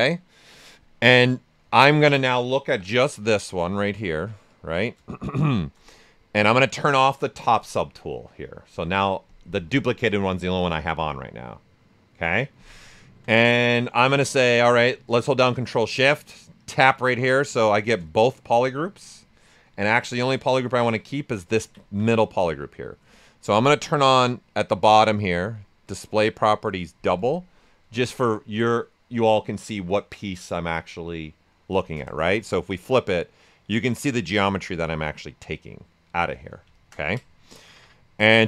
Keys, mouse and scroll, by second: 1.3 alt+right click, 2.6 shift+f, 3.0 space, 3.3 alt+right click, 4.1 s, 4.4 click, 4.7 s, 5.0-7.3 shift+drag, 12.8 alt+right click, 13.9 shift+d, 14.2 right click, 16.6 ctrl+shift+click, 18.0-20.4 shift+right drag, 20.4 ctrl+shift+click, 21.1-23.6 alt+right drag, 23.6-25.8 drag, 28.6-31.8 right drag, 31.8 ctrl+shift+click, 32.7-36.7 right drag, 36.7 ctrl+shift+click, 37.4 right click, 38.2-38.4 drag.